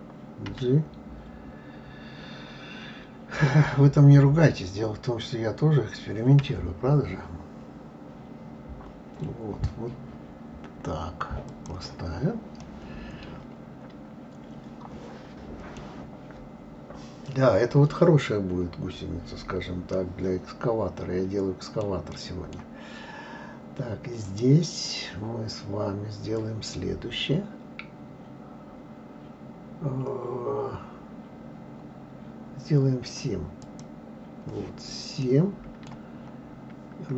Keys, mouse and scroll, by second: 0.5 g, 12.6-15.6 middle drag, 18.7-19.2 scroll up 2, 19.2 scroll down 2, 19.9-23.1 middle drag, 23.1-24.3 scroll up 1, 24.3 click, 33.6-34.4 drag, 35.2-36.1 middle drag, 36.1-36.7 scroll up 3.